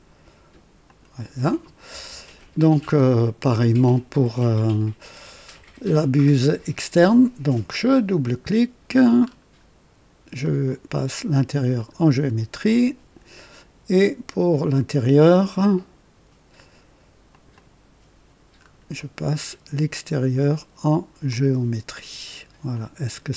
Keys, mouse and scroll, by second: 0.8 click, 4.5 click, 7.8 click, 9.1-9.5 scroll up 2, 10.3 click, 11.7 click, 12.6 click, 17.2 click, 18.5 scroll up 1, 18.9 right click, 20.1 click, 21.2 click, 22.6 click.